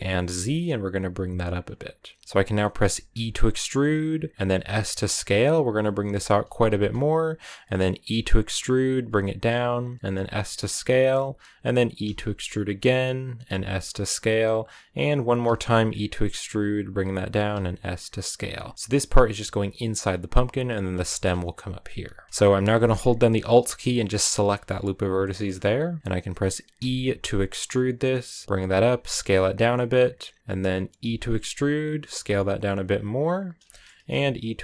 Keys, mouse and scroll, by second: 3.1 e, 4.3 s, 5.8 s, 6.2 g, 7.9 e, 10.0 s, 11.9 e, 13.3 s, 15.4 e, 17.3 s, 18.4 a, 18.7 a, 20.9-22.3 shift+middle drag, 22.3 scroll up 2, 24.2 alt+right click, 25.0 shift+middle click, 25.4-25.9 scroll down 1, 26.0 scroll up 1, 26.6 e, 28.7 s, 30.9 e, 32.0 s, 33.3 scroll down 2, 33.5 shift+middle click, 34.1 e.